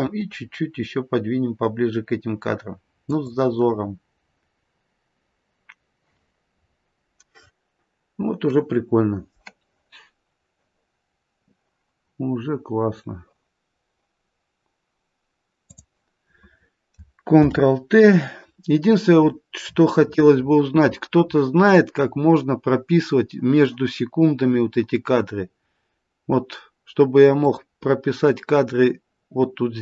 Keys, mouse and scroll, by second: 0.0 g, 6.6-7.4 scroll up 3, 7.4-8.1 scroll down 2, 15.6 click, 17.3 ctrl+t, 19.2-20.8 scroll up 17, 21.2-24.3 scroll up 25, 27.4 click.